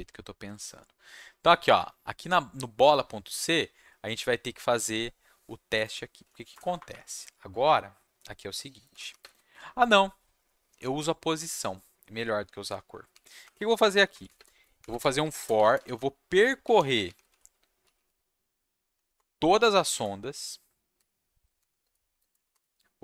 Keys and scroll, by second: 6.5 Return, 6.6 Return, 6.7 Return, 6.9 Up, 7.5 Tab, 8.6-9.6 typing, 13.1-17.8 typing, 18.8 Down, 18.9 Down, 19.1 Return, 19.7 /, 19.9 space, 20.9-22.3 typing, 22.5 Return.